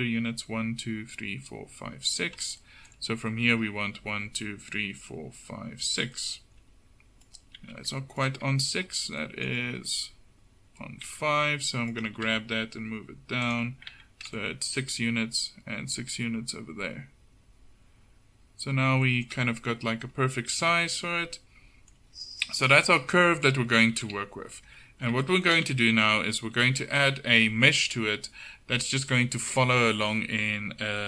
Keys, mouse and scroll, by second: 7.7 Tab, 11.1 Tab, 12.2 g, 14.0 Tab, 20.8 Tab, 24.1 KP_7, 24.7 Tab, 25.8 a.